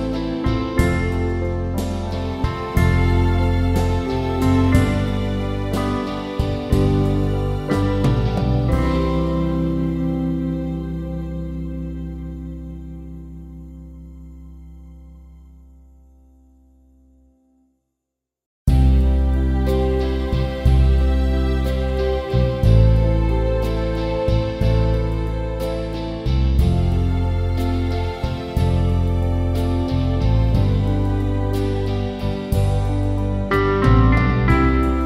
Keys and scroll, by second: 21.6 Return, 28.7 ctrl+t, 29.4 ctrl+alt+t.